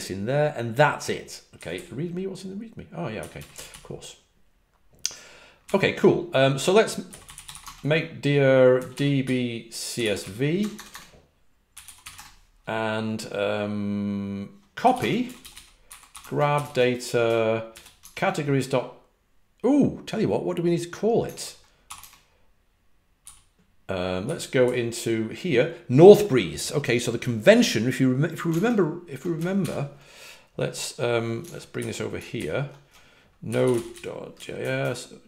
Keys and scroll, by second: 1.5 typing, 3.1-3.6 typing, 5.6 typing, 6.7-12.4 typing, 14.5-17.0 typing, 22.9-24.5 typing, 29.5 super+n, 31.7 alt+super+Left, 32.3 ctrl+alt+super+Left, 33.4-35.2 typing.